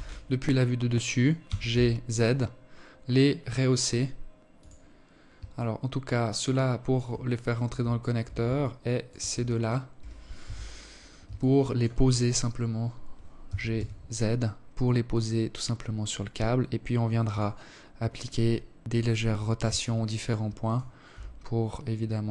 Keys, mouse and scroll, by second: 4.1 alt+click, 6.0 right click, 7.1 alt+click, 8.1 shift+right click, 8.9 KP_1, 9.9 alt+shift+click, 10.6-11.4 scroll up 3, 12.0 g, 18.3 alt+click, 19.1 right click, 19.6 s, 22.1 r.